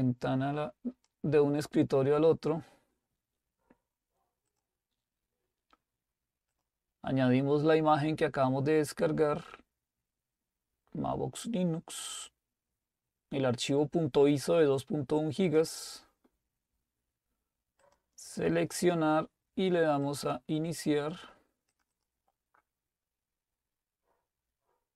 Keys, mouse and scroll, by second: 4.5-5.6 drag, 6.5 click, 10.0-11.3 scroll down 2, 12.1 click, 15.5 click, 17.8 click, 20.1 click, 22.1 click.